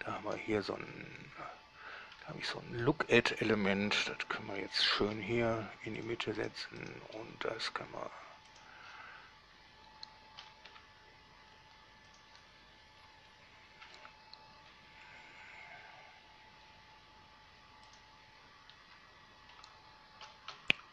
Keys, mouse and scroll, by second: 0.0 right click, 1.1 scroll up 1, 2.4-3.3 middle drag, 5.4 g, 6.3 drag, 6.7 right drag, 7.1 right click, 7.4 g, 8.8 click, 10.7 g, 11.0 z, 12.4 click, 13.2-13.5 scroll down 1, 13.5 scroll up 1, 13.6 scroll down 1, 15.0 g, 18.2 drag, 19.1 scroll down 1, 19.2 middle click, 20.5 g, 20.8 z.